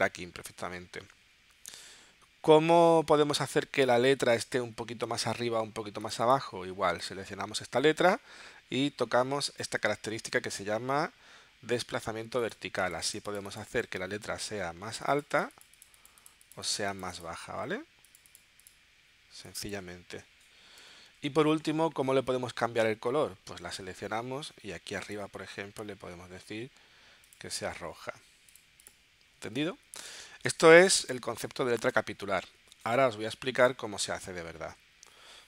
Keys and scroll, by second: 20.8 0, 30.5 space.